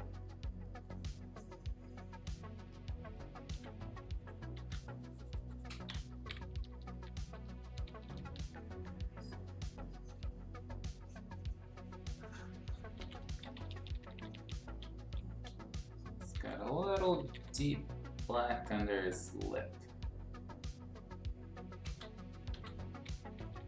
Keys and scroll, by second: 3.5 x, 4.5 ctrl+z, 6.1-8.1 typing, 12.7-14.8 typing, 16.3 ctrl+z, 17.1 [, 17.2 [, 17.4 [, 22.5-23.6 typing.